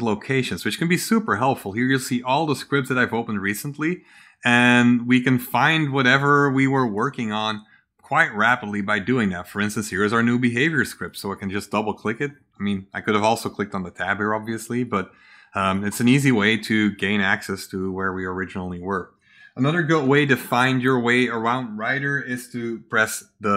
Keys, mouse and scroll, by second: 0.7 middle click, 0.7-1.3 scroll down 3, 1.7-2.8 scroll up 4, 6.6 scroll up 2, 8.7 scroll down 2, 10.7 click, 10.9 click, 14.3 click, 14.8 click, 15.5 click, 16.0 click.